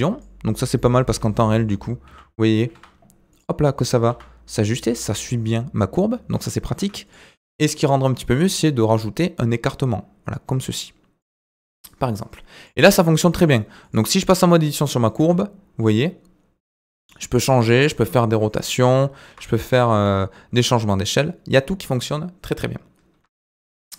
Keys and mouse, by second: 1.1 Tab, 2.1 g, 4.1 g, 6.8 Tab, 8.2-11.2 drag, 11.9 middle click, 12.9 Tab, 13.4 Tab, 14.3 Tab, 15.2 g, 18.5 r, 19.9 alt+s.